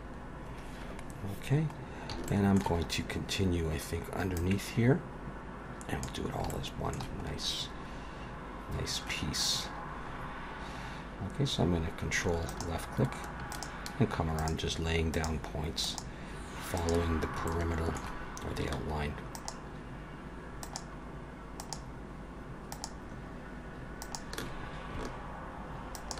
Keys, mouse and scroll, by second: 2.3 shift+middle click, 3.0 scroll up 1, 4.4 click, 6.5 shift+middle click, 7.3-8.6 scroll up 3, 8.6-9.5 scroll down 2, 9.6-10.8 scroll up 4, 12.5 ctrl+right click, 13.5 ctrl+right click, 14.4 ctrl+right click, 15.2 ctrl+right click, 15.8 ctrl+right click, 16.8 ctrl+right click, 17.5 shift+middle click, 19.3 ctrl+right click, 21.6 ctrl+right click, 22.7 ctrl+right click, 24.0 ctrl+right click, 25.9 ctrl+right click.